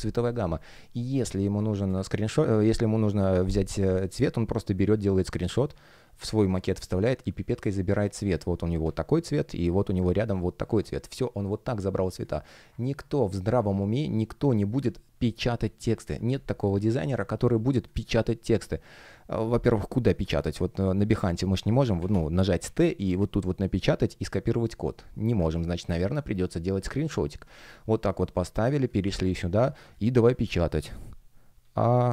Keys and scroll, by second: 1.2 space, 2.1 super+3, 7.2 super+m, 15.5 space, 25.3 super+3, 31.5 shift+a.